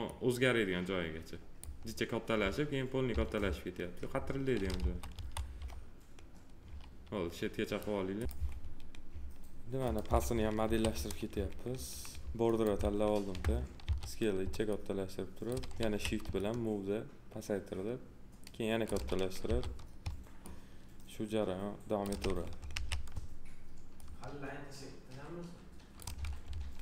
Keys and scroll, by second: 4.7 F4, 10.6 3, 13.8 r, 15.7 w, 19.4 r, 22.7 w.